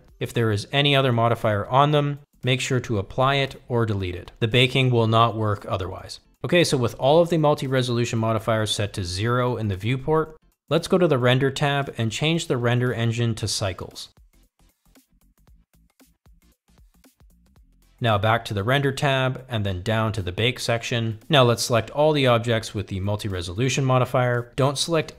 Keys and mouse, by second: 2.4 click, 5.4-6.6 drag, 7.4 click, 8.8-10.6 drag, 14.2 click, 16.5-18.3 drag.